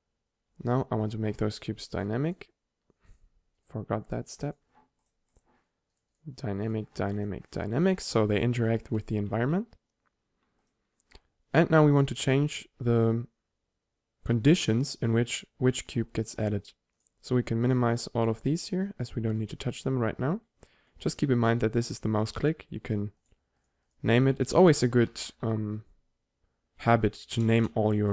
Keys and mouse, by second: 0.6 2, 7.2 right click, 9.0 right click, 9.5 1, 9.9-10.7 middle drag, 17.0-20.9 drag.